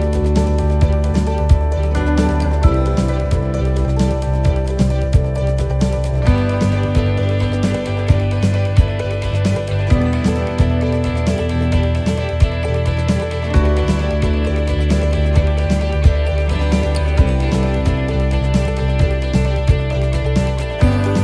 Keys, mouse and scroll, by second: 1.4 click, 2.9 click, 4.3 middle click, 5.3 right click, 6.2 l, 7.2 shift+d, 8.6 click, 9.9 click, 12.2 click, 13.5 click, 14.5 middle click, 15.5 middle click, 17.0 shift+d, 18.6 click, 20.0 click.